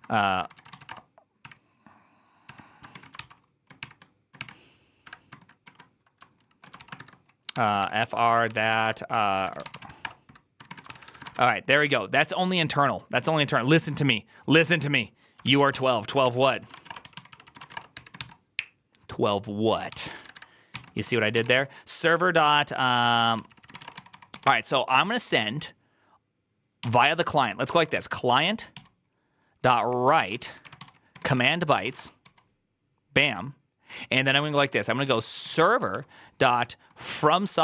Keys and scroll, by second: 0.0-5.5 typing, 6.6-11.6 typing, 15.2-18.5 typing, 16.1 ctrl+n, 16.3 ctrl+c, 19.7-25.0 typing, 26.7-32.6 typing, 34.0-36.3 typing, 36.9 ctrl+y, 37.5 ctrl+c, 37.5-37.6 typing.